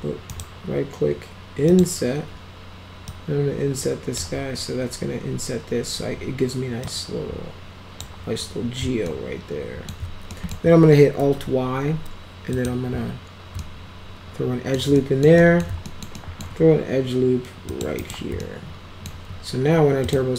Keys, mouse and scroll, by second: 0.2 right click, 1.6 click, 3.0-4.1 drag, 6.8-7.9 drag, 9.0 alt+middle click, 10.2 middle click, 11.2 alt+y, 12.5 click, 13.5-14.7 alt+middle drag, 14.9 alt+middle click, 15.3 middle drag, 15.8 alt+middle click, 16.1 alt+middle click, 17.6 click, 17.9 right click, 18.3 alt+middle click, 20.0 click.